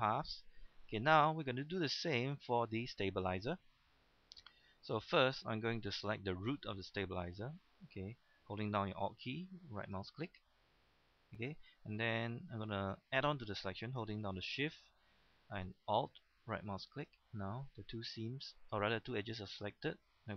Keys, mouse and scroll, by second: 1.0 scroll up 1, 1.4 shift+middle click, 1.7 scroll up 1, 2.1 shift+middle click, 2.5 scroll up 1, 3.2 shift+middle click, 4.3 shift+middle click, 5.0 shift+middle click, 9.8 alt+right click, 10.7-12.4 middle drag, 16.9 alt+shift+right click, 17.6-20.3 middle drag.